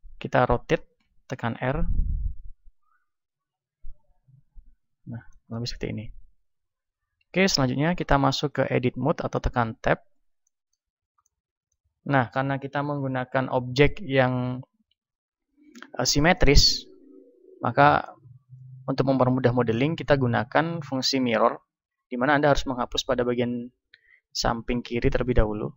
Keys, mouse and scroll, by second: 1.2 r, 2.5-9.3 drag, 5.1-8.5 middle drag, 9.3-22.7 middle drag, 9.7 a, 22.7 ctrl+r, 25.4-25.7 drag.